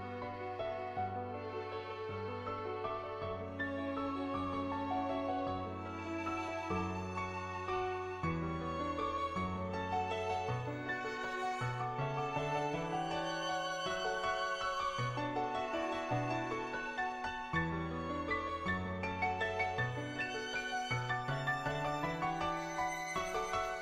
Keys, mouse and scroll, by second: 2.5-4.0 drag, 4.2 click, 4.7 middle click, 5.8 shift+click, 6.1 middle click, 6.6 shift+click, 7.7-10.6 drag, 11.0 shift+click, 11.4 middle click, 12.2 shift+click, 12.7 middle click, 13.1 middle click, 18.1 click, 19.4-19.9 ], 20.3 click, 20.8 [, 21.0 click, 21.6 click, 21.8 [, 22.2 click, 23.0 click.